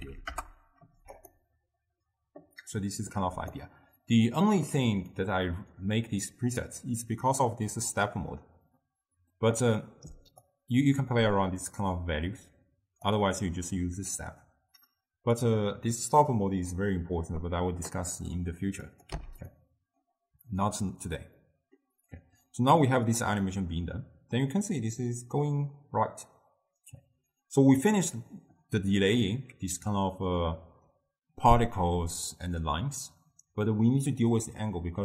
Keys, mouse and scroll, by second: 3.4 d, 3.7-4.7 right drag, 4.7 d, 4.7 d, 5.2 click, 10.5-13.6 drag, 15.4-18.5 drag, 19.0 click, 19.2 x, 19.6-23.2 middle drag, 23.2-26.3 drag.